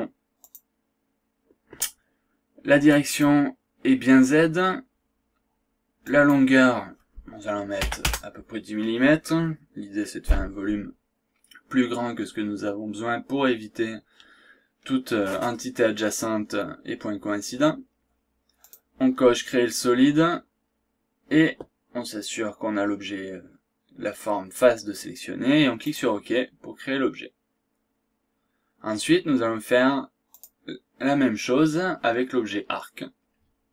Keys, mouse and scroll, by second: 0.4 click, 2.9 click, 6.0 click, 7.8 KP_1, 8.0 KP_0, 18.6 click, 25.8 click, 30.3 click.